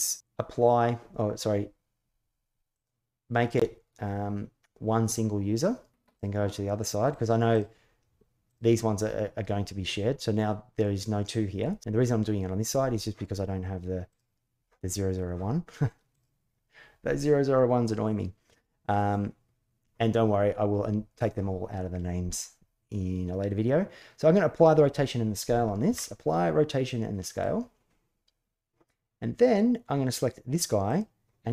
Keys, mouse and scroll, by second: 2.5 click, 5.9 click, 6.8 click, 7.3 click, 8.2 click, 13.9 click, 15.9 click, 25.6 ctrl+a, 30.6 click.